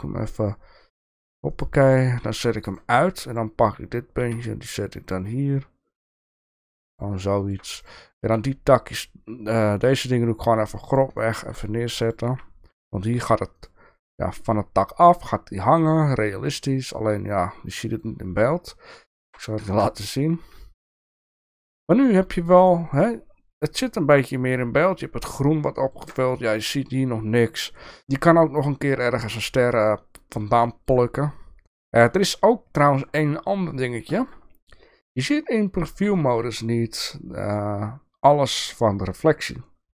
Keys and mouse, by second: 2.6 click, 3.3 click, 4.2 g, 7.5 shift+middle click, 7.8 click, 11.1 shift+middle click, 15.8 click, 19.2 Tab, 19.6 KP_0, 21.2 click, 25.0-25.9 shift+middle drag, 30.6 shift+middle drag, 32.7 shift+middle click, 34.1 shift+middle drag, 35.0 shift+middle drag, 36.2 shift+middle drag.